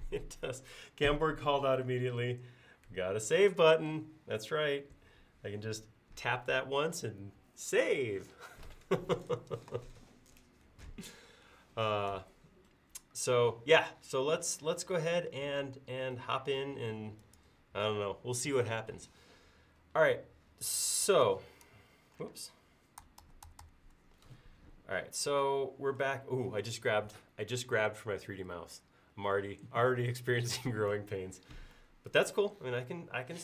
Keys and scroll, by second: 22.4 space, 23.3 super+z.